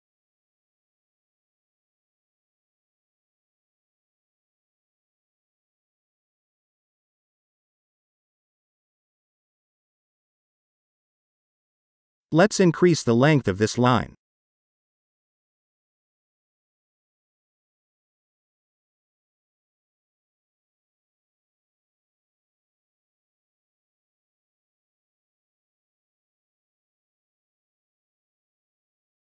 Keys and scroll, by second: 11.8-12.6 typing, 21.8 space.